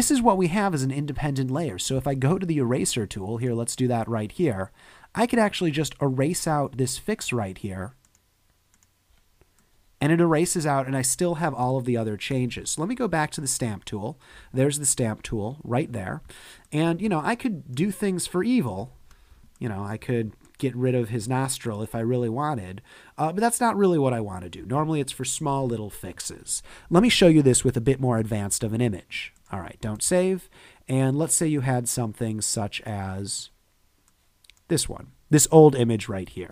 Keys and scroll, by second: 11.7 space, 13.0 s, 17.0 space, 18.9 super+z, 24.6 super+z, 28.5 super+w, 30.2 super+Tab.